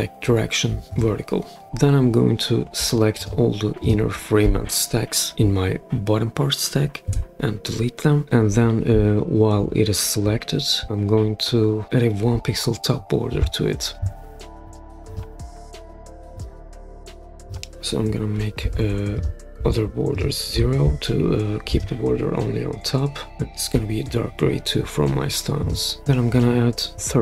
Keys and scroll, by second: 7.0 BackSpace, 18.6 0.